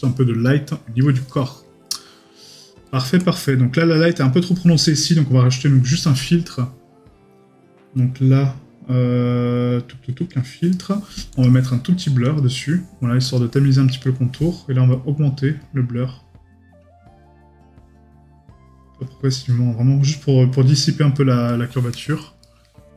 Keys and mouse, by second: 1.3 right click, 2.0 middle click, 2.6 right click, 5.1 right click, 10.7 right click, 22.4 right click.